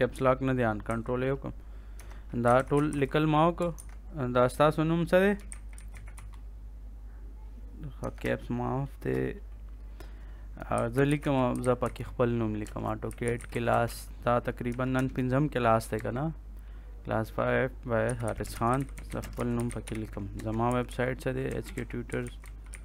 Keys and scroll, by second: 0.8 ctrl+a, 1.9 Caps_Lock, 2.1-3.5 typing, 3.7 ctrl+Caps_Lock, 5.1-6.5 typing, 8.0 Caps_Lock, 8.2 BackSpace, 10.4-14.9 typing, 15.9 Return, 17.7-22.8 typing.